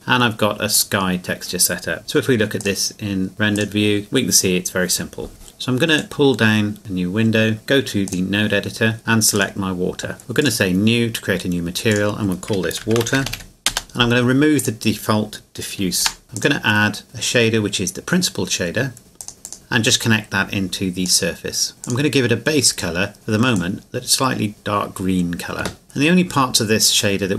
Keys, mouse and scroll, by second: 0.7 click, 6.0 click, 8.9-9.3 scroll up 2, 9.3 right click, 10.2 click, 12.8-13.8 typing, 13.7 Return, 14.0-14.6 scroll up 1, 14.6 click, 16.0 Delete, 16.3 click, 19.2 click, 21.8 click, 25.8-26.1 scroll up 1.